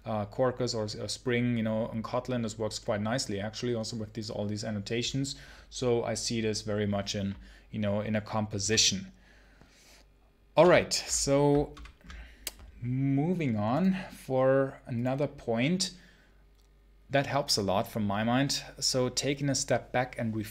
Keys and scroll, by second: 8.5 h.